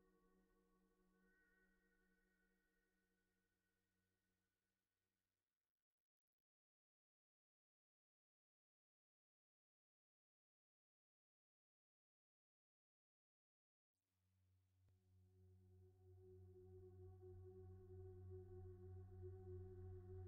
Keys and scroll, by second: 14.1 b.